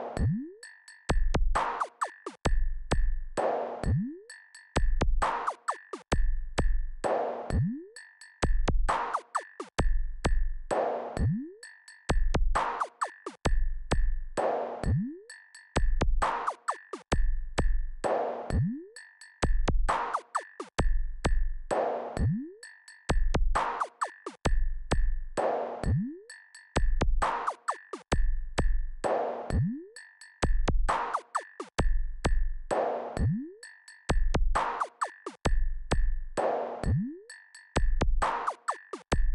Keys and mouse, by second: 1.8 KP_Subtract, 8.9 click, 12.8 click, 22.2-32.0 drag.